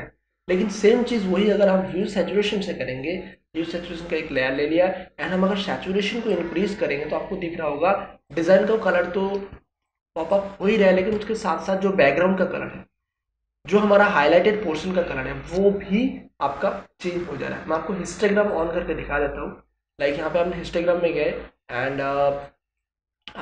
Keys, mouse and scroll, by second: 1.4-9.5 drag, 9.5 ctrl+space, 10.8 space, 18.5 click, 22.4-23.4 drag.